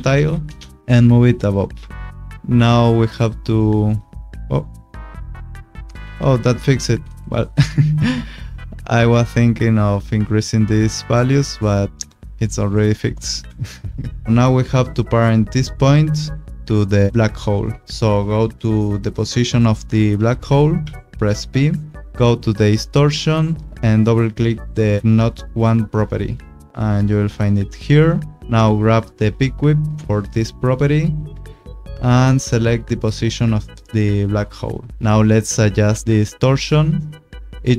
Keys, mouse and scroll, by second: 0.0 o, 0.1 n, 0.4 Return, 0.8 click, 4.2 click, 11.9 click, 13.4 ctrl+z, 14.4 click, 17.2 click, 20.8 p, 26.0 click, 26.8 click, 30.0 click, 37.4 click.